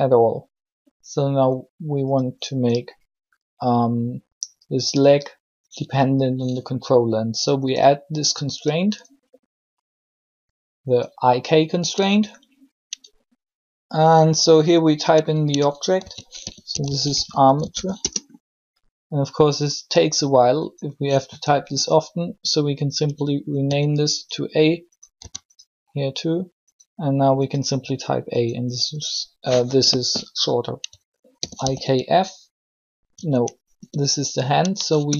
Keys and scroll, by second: 15.8-17.2 typing, 17.7 Return, 23.5 a, 25.1 a, 31.2 shift+i, 31.4 shift+k, 33.7 BackSpace, 35.0 BackSpace.